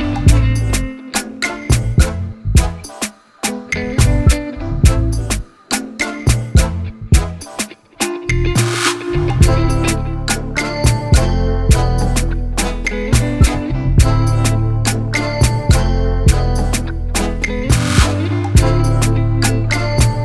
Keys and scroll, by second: 0.3 ctrl+z, 6.5 ctrl+=.